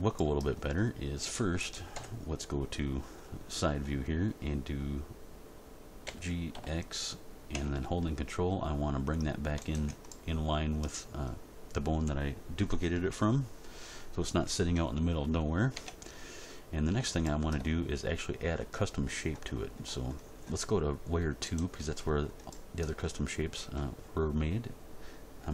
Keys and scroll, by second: 1.9 End, 6.0 g, 6.5 x, 15.7 Tab.